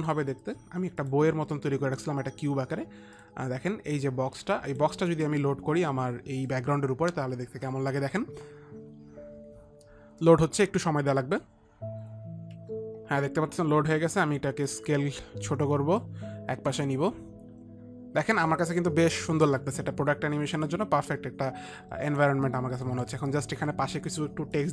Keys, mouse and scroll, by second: 0.2 click, 1.5 click, 5.2 click, 5.8 click, 13.0 F9, 15.3 F9, 15.3 click, 15.3 s, 17.2 F9, 17.2 click, 17.2 s, 18.8 click, 21.1 click, 21.3 Up, 22.4 Up, 22.7 click, 23.3 click, 23.6 shift+Left.